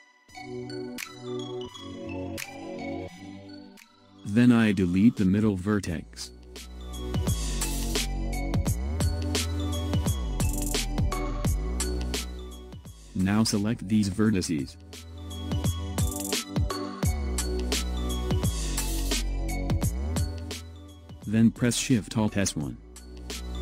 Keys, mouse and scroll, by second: 0.1 click, 2.0 click, 4.7 x, 6.9-7.5 scroll up 2, 7.5-10.5 middle drag, 11.3 scroll down 1, 13.1 click, 14.5-17.7 middle drag, 17.7 scroll down 2, 22.1 alt+shift+s.